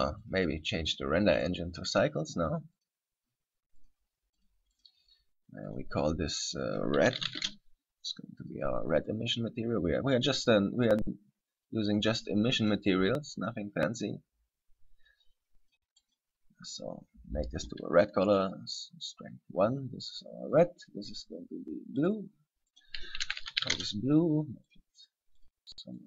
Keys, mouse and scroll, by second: 0.5 click, 1.1 click, 3.0 click, 4.0 click, 4.6 click, 5.0 click, 5.8 click, 8.6 click, 11.1 click, 12.2 click, 20.7 right click, 22.2 click, 23.0 click, 24.9 click, 25.6 click.